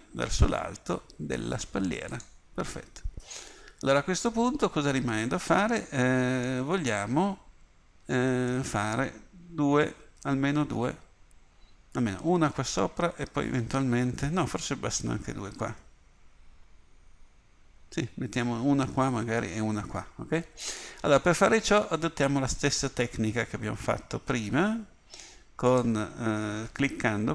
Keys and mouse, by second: 2.8-4.6 middle drag, 8.5 middle click, 13.4-20.9 middle drag, 22.7 middle click, 25.7-27.3 drag.